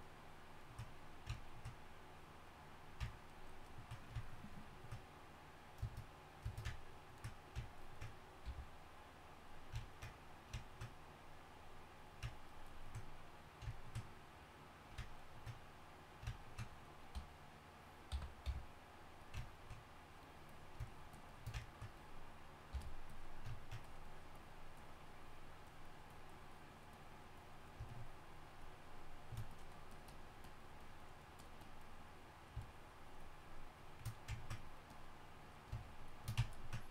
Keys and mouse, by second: 9.8 f, 15.1-19.4 drag, 19.4 f, 22.7 f.